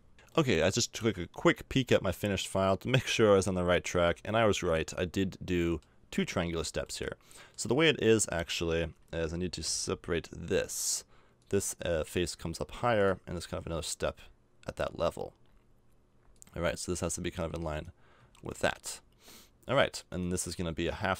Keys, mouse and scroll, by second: 0.3-1.3 middle drag, 1.6 middle click, 1.9 middle click, 4.3-5.6 middle drag, 8.3 a, 9.6 l, 18.2 a, 18.4 Tab, 18.7 middle click, 20.1 right click, 21.0 middle click.